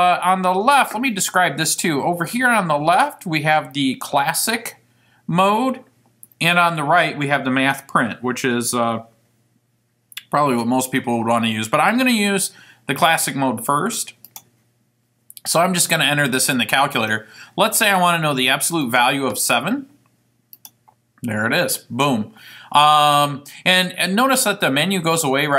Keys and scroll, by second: 14.4 Return, 18.1 7, 19.0 ), 20.7 Return.